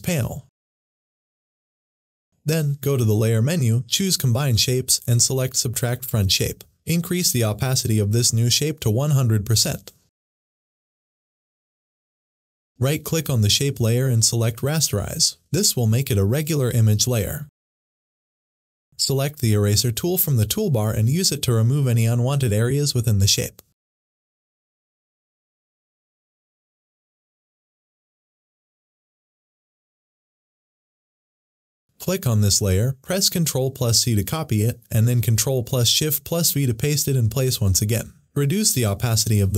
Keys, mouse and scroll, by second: 2.8 click, 5.2 click, 8.7-11.7 drag, 14.9 right click, 16.9 click, 20.7-28.9 drag, 29.2 click, 32.0 click, 33.6 ctrl+c, 36.5 ctrl+c, 37.0 ctrl+shift+v, 39.3 click.